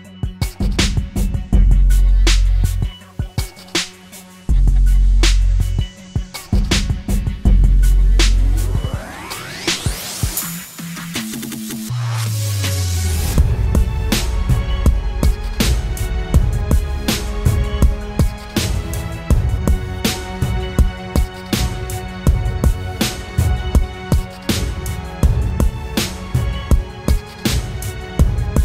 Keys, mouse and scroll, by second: 2.6-3.5 alt+scroll down 1, 4.2 ctrl+click, 9.0-9.5 alt+scroll down 1, 17.1 Return, 22.2 ctrl+t.